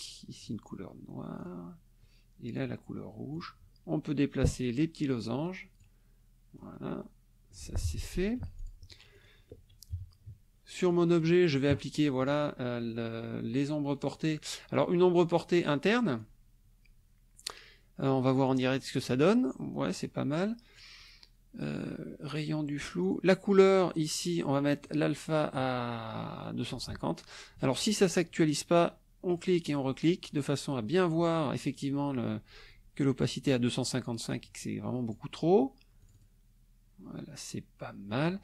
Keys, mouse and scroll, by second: 0.4 click, 1.4 click, 2.5 click, 3.3 click, 4.6-6.0 drag, 6.5 click, 8.2 F1, 8.6 click, 9.1 click, 9.9 -, 10.9-11.4 drag, 12.2 click, 14.7 click, 15.8 click, 18.5 click, 19.9 middle click, 23.0 click, 24.8-25.7 drag, 29.3 click, 29.7 click, 34.3-35.3 drag, 36.0 click.